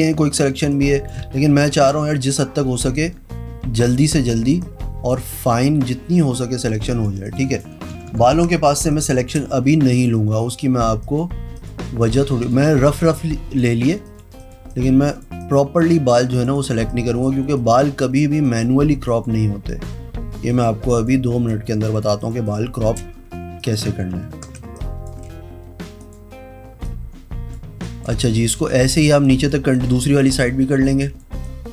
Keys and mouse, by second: 0.8 space, 0.8 click, 1.6 ctrl+KP_Add, 3.1 click, 4.0 click, 4.7 click, 5.7 click, 6.3 click, 7.0 click, 7.4 click, 8.1 ctrl+KP_Subtract, 8.9 space, 9.1 click, 9.3 click, 10.1 click, 10.6 click, 11.1 click, 11.7 click, 12.1 click, 12.6 click, 13.0 click, 13.2 space, 13.3 click, 14.2 click, 14.9 click, 15.6 click, 15.9 click, 16.2 click, 16.5 click, 16.7 click, 17.0 space, 17.7 click, 18.2 click, 18.6 click, 19.2 click, 19.8 click, 21.0 click, 21.6 click, 22.0 click, 22.3 click, 22.5 space, 22.6 click, 22.9 click, 23.7 click, 24.8 space, 24.9 click, 26.2 click, 27.0 click, 28.0 click, 28.2 space, 28.4 click, 29.4 click, 31.5 space.